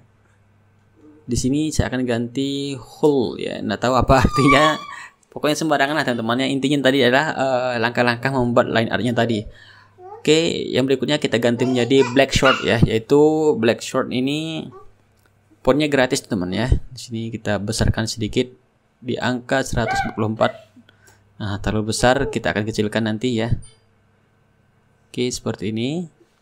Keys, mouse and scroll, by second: 0.0 ctrl+a, 2.2 shift+h, 2.5 u, 3.7 l, 5.6-7.9 typing, 8.2 ctrl+a, 9.4 click, 10.6-11.6 typing, 12.5 click, 15.4 click, 16.5 KP_0, 16.9 Return, 18.5-20.7 drag, 21.2 click, 22.4-26.4 shift+right drag, 24.0-26.4 drag.